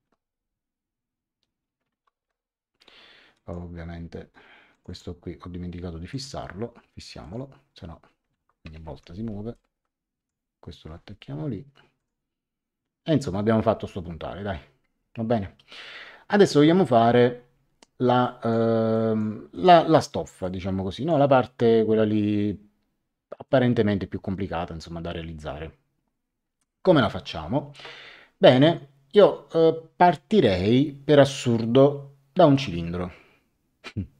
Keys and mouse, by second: 1.9 ctrl+z, 3.3 click, 4.7 click, 6.1 click, 7.2 click, 8.8 Escape, 9.5 click, 11.9 click, 18.2 click, 23.4 click.